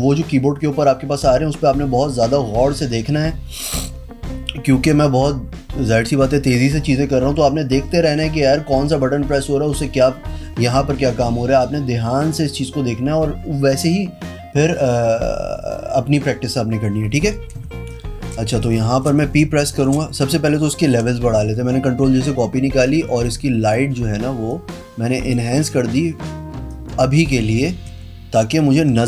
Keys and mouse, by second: 17.4 click, 17.8 space, 18.1 click, 18.6 z, 18.8 click, 19.2 space, 19.3 click, 20.9 ctrl+l, 23.0 click, 24.7 click, 26.8 click, 28.9 p.